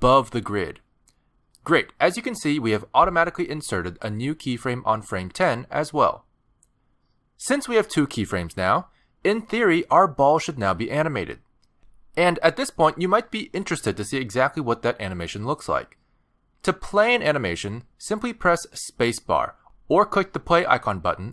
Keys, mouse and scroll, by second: 0.0 middle click, 1.2 middle click, 1.6 scroll down 3, 1.9 shift+middle click, 2.2 middle click, 2.7 shift+middle click, 19.2 space, 21.1 click.